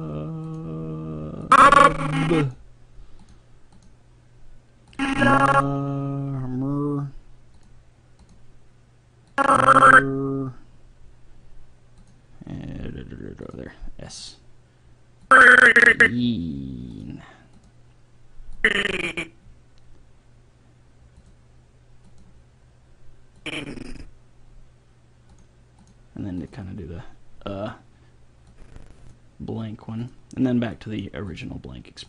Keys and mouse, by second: 3.3-6.6 drag, 7.6-11.0 drag, 12.0-18.7 drag, 16.3-18.3 middle drag, 25.0 click, 25.4-28.2 drag, 28.5-32.0 drag.